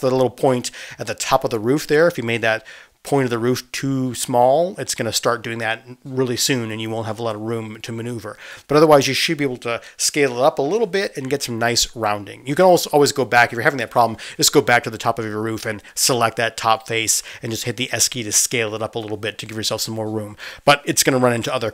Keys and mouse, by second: 2.6-5.5 middle drag, 5.5 Tab, 6.0 click, 7.4-11.0 middle drag, 7.4 s, 11.5-17.0 middle drag, 13.8 space, 19.4 z.